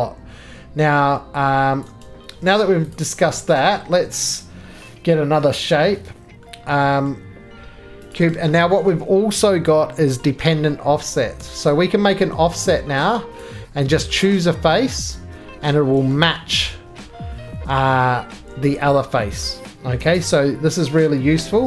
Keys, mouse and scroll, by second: 1.8 click, 2.0 right click, 2.6 middle click, 2.9 click, 3.5 middle click, 3.7-4.2 scroll down 1, 4.2 middle click, 4.3-5.1 scroll down 5, 5.1 middle click, 7.0 middle click, 19.1 right click, 19.1 scroll down 9, 19.4-21.4 middle click, 20.0 4, 20.2 click, 21.4 g.